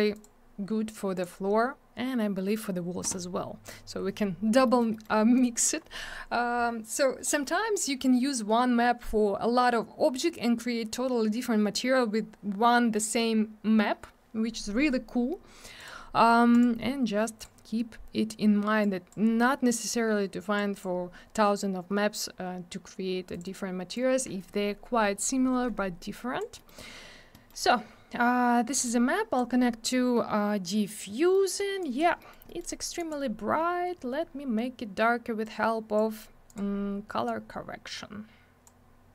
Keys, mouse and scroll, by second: 0.1 click, 0.2 click, 1.1 click, 1.2 click, 3.6 click, 3.7 click, 4.6 middle click, 4.8 middle click, 4.9 middle click, 5.0 middle click, 5.3 click, 15.8 click, 15.9 click, 16.5 click, 16.6 click, 17.2 click, 17.4 click, 18.8 click, 19.7 click, 20.7 click, 20.8 click, 23.3 click, 23.4 click, 23.4 click, 23.5 click, 23.9 click, 26.0 click, 26.5 middle click, 26.6 middle click, 27.3 middle click, 27.4 middle click, 27.6 scroll up 1, 28.7 click, 31.3 middle click, 31.5 middle click, 31.8 click, 31.9 double click, 32.2 middle click, 32.3 middle click, 32.4 middle click, 32.5 double middle click, 33.0 click, 33.1 click, 33.5-33.9 scroll down 1, 35.4 click, 36.4 click, 36.5 click, 37.2 click.